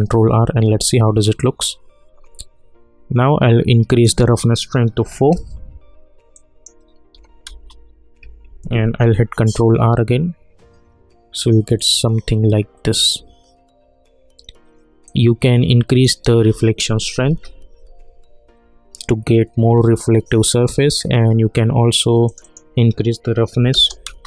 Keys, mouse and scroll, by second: 3.9 click, 5.3 Return, 6.3 click, 7.5 Return, 8.8 ctrl+r, 15.0-17.2 drag, 17.2 ctrl+r, 22.2 click, 24.0 Return.